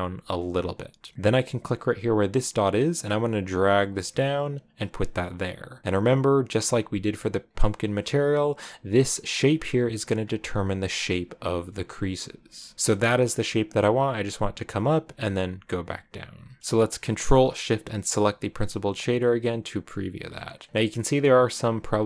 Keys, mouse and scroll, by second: 0.6 scroll up 3, 1.9-4.9 drag, 6.1-6.7 scroll down 8, 7.4-7.9 scroll up 4, 9.9 scroll up 2, 13.6 click, 17.9 ctrl+shift+click, 18.0-19.2 middle drag, 19.2-20.0 scroll down 2, 20.2 shift+middle click, 20.6-21.1 scroll up 3.